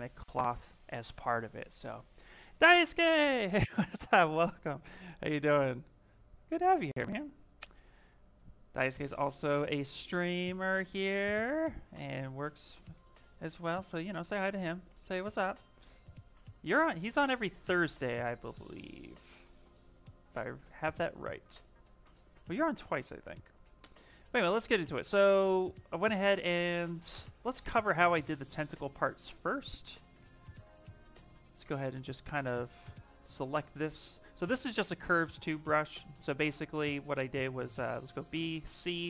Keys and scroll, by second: 10.6 s, 12.9 b, 13.2 m, 14.6 ,, 15.6 s, 17.7 ctrl+z, 28.8 shift+f, 29.2 shift+f, 30.0 shift+f, 35.4 s, 36.9 s, 37.6 b, 38.1 c.